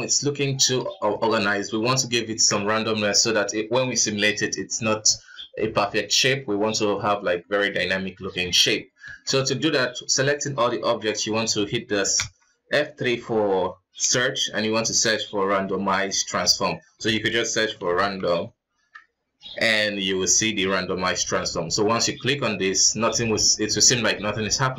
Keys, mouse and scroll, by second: 1.0 ctrl+s, 1.3-5.1 middle drag, 8.6 KP_1, 9.3 ctrl+s, 9.6-11.2 shift+middle drag, 11.2 F4, 12.4 F3.